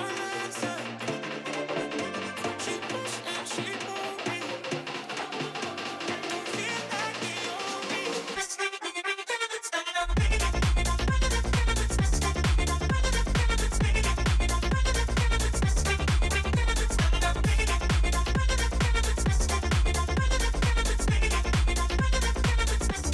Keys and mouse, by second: 4.9 click, 7.7-9.2 shift+drag, 10.5 click, 12.4 click, 12.9 Tab, 13.6 Tab, 14.3 click, 19.2 ctrl+a, 19.9 ctrl+a, 21.4 ctrl+a.